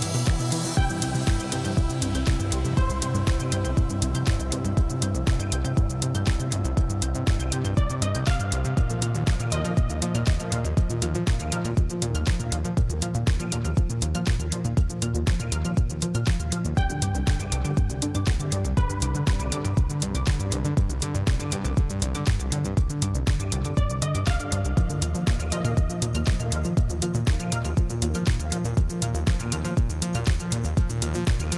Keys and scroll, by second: 0.6 Tab, 2.6 Tab, 3.2 ctrl+b, 3.2 ., 3.4 Return, 4.3 3, 5.7-6.8 typing, 6.0 Return, 7.0 ctrl+v, 10.7-13.6 typing, 15.0 s, 15.7 g, 16.2 s, 16.6 g, 19.2-19.7 typing, 19.9 Return, 22.2 5, 22.4 Return, 22.7 Tab, 22.9 alt+a, 24.8 Tab, 26.3 2, 26.6 ctrl+b, 26.7 ., 26.9 Return, 28.0 j, 28.2 n, 28.4 Return, 29.3 x, 29.5 ctrl+v.